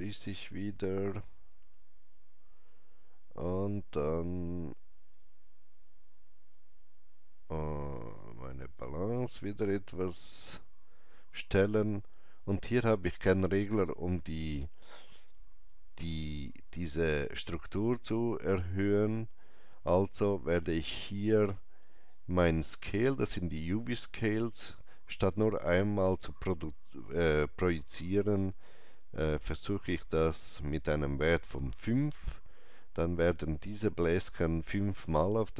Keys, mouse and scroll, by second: 2.5 click, 2.5 scroll down 1, 3.2-3.8 scroll up 1, 4.9 scroll down 1, 8.4-12.7 drag, 8.4 scroll down 1, 18.9 click, 18.9 scroll up 1, 21.9 click, 29.5 click, 29.5-30.5 scroll up 1, 29.5 KP_5, 30.8 Return.